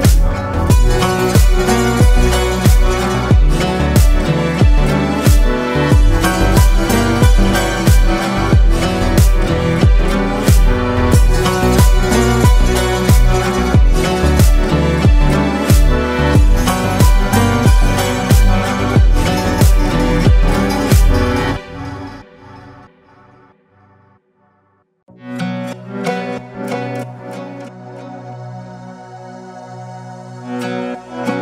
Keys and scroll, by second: 1.3 Escape, 5.5 ctrl+space.